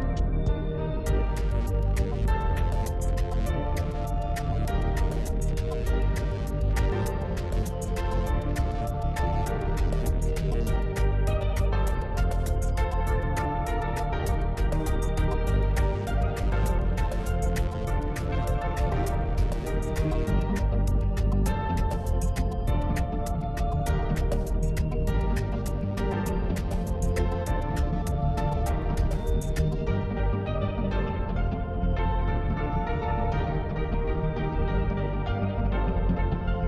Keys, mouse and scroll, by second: 0.5 click, 1.0 scroll down 1, 1.4 click, 2.1 click, 2.3-3.6 scroll down 1, 3.6 click, 4.4-6.0 middle drag, 6.0-6.5 scroll up 1, 6.5 scroll up 1, 6.6-7.2 middle drag, 7.2-7.7 scroll up 1, 7.7 Tab, 9.3 alt+click, 10.5 alt+click, 11.5-14.1 middle drag, 14.1 click, 14.7-15.3 scroll up 2, 15.8-18.8 middle drag, 20.2-20.5 scroll down 2, 21.2-23.5 middle drag, 23.5 scroll up 1, 24.2-24.5 scroll down 2, 25.5 Tab, 27.4 drag, 28.0 click, 30.9 click, 31.7 click, 32.2-34.4 drag, 34.4-35.2 middle drag, 35.2 click, 35.6 Tab, 36.2 middle click.